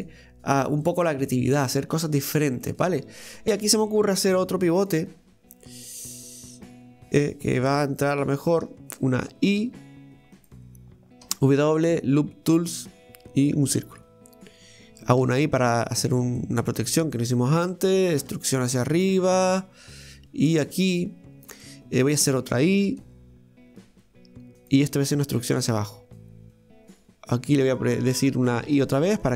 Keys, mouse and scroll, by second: 0.9 click, 1.3 middle click, 2.2 Tab, 2.7-3.9 middle drag, 4.4 ctrl+r, 6.6 click, 7.4 right click, 7.7 shift+right click, 8.0 shift+right click, 8.5 shift+right click, 9.6 i, 16.4-18.2 middle drag, 18.2 e, 21.2-21.6 scroll up 1, 21.6-23.0 middle drag, 23.0 i.